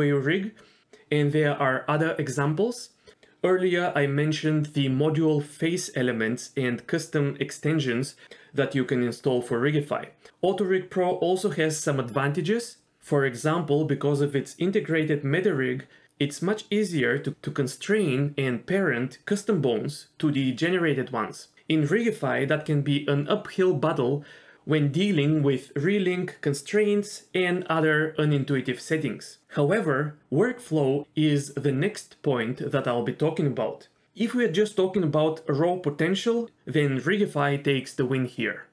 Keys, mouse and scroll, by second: 1.1 shift+middle click, 1.4-2.0 scroll up 1, 2.0-3.4 drag, 3.5 scroll down 1, 3.6 shift+middle click, 4.4-6.2 drag, 6.7-7.5 scroll up 3, 7.1 g, 9.0 KP_3, 10.1 g, 12.3 click, 14.9 click, 16.4 l, 20.3 g, 20.6-21.3 scroll up 1, 20.6 s, 24.5 s, 29.7 click, 30.0 g, 34.0 click, 34.6 g.